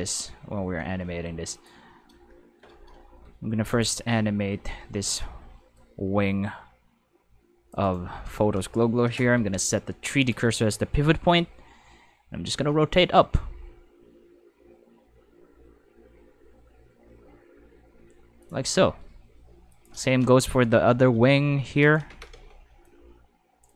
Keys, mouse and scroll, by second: 1.5 click, 3.1 shift+Tab, 3.7 click, 4.9 c, 5.7-7.7 drag, 7.8 middle click, 10.2 click, 11.2 r, 18.4 click, 19.7 click, 20.9 c, 21.8 click, 22.1 alt+a, 22.3 c, 22.8-23.6 drag.